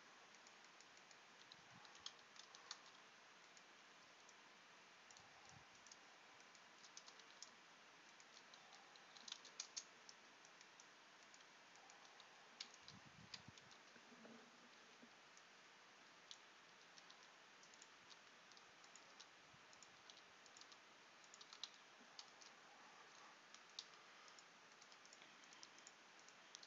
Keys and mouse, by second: 1.9 s, 2.8 z, 5.4 z, 9.2 s, 13.6 z, 14.8 c, 17.2 e, 18.0 r, 19.2 e, 20.2 r, 20.6 g, 21.7 z, 23.9 g, 25.6 g.